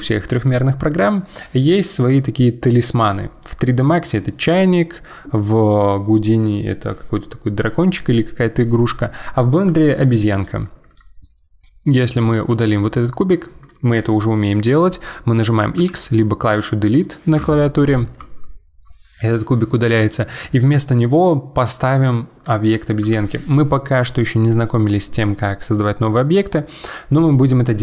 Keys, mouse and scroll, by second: 10.5 click, 10.9 click, 12.5 x, 15.8 x, 18.2 Delete.